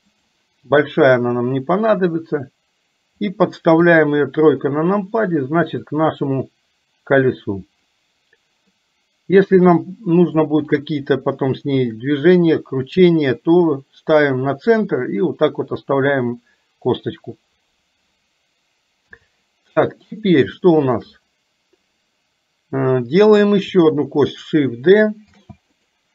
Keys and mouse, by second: 1.0-3.3 drag, 3.9 KP_3, 6.0-8.0 drag, 8.9-10.5 drag, 11.4 shift+middle click, 19.0 KP_7, 20.6 middle click, 25.4 shift+d.